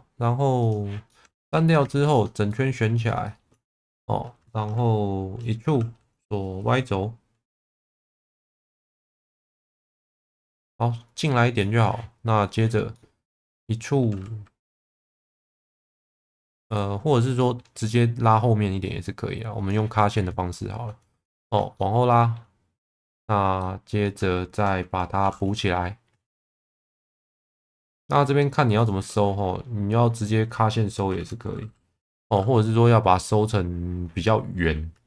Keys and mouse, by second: 0.6 click, 1.1 middle click, 1.5 2, 2.0 alt+click, 2.5 middle click, 3.2 shift+middle click, 5.8 e, 8.0 y, 9.6 click, 10.1 middle click, 11.6 middle click, 13.0-14.0 middle drag, 14.7 e, 17.4 middle click, 17.9 middle click, 18.9 click, 20.5 middle click, 21.4 shift+middle click, 21.7 middle click, 23.6 middle click, 25.2 f, 27.1 1.